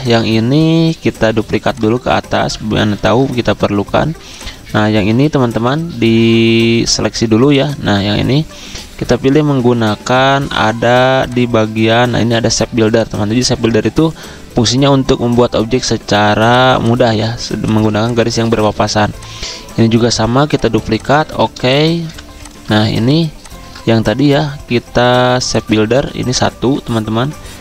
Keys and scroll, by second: 17.4 z, 18.3 v, 20.4-22.0 typing.